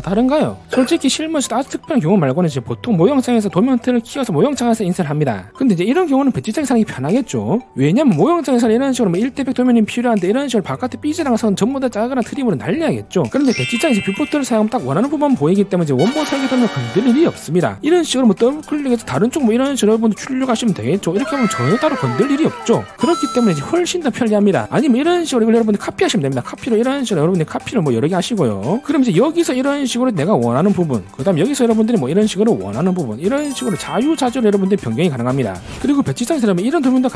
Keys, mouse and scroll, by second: 18.7 click, 19.0 click, 19.5-20.9 middle drag, 21.7 click, 24.1 click, 24.3 click, 25.3 middle click, 25.9 c, 26.0 c, 26.2 right click, 26.4 click, 26.8 click, 27.1 right click, 27.3 click, 28.1 shift+click, 28.8 middle click, 29.2 middle click, 29.5 click, 29.7 click, 30.4 middle click, 31.8 click, 32.0 click, 32.8 middle click, 33.7 click, 34.7 scroll up 1.